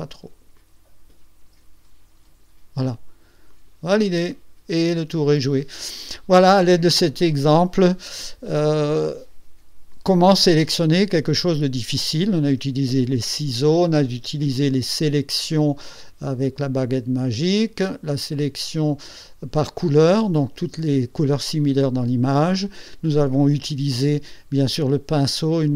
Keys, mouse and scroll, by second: 0.7-2.7 drag, 3.6 click, 4.4 middle click, 4.6-5.6 drag.